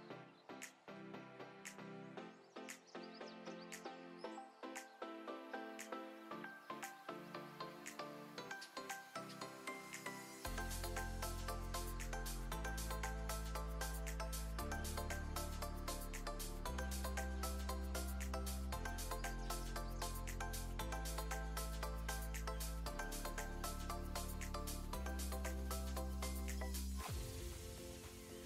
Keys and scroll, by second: 0.0 0, 0.1 Return, 1.7-4.8 typing, 10.5 7, 10.6 Return, 10.6 0, 14.0-14.8 typing, 18.1-21.0 typing, 18.5 Caps_Lock, 23.1 alt+space, 25.0-27.8 typing.